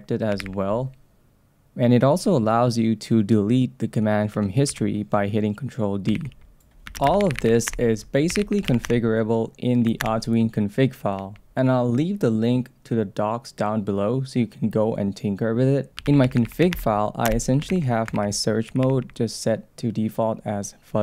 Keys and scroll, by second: 0.4 ctrl+o, 4.7 ctrl+d, 6.1 ctrl+c, 7.0 space, 7.7 Return, 8.6 space, 8.9 Return, 17.3 Return, 17.7 ctrl+c, 18.1 shift+v.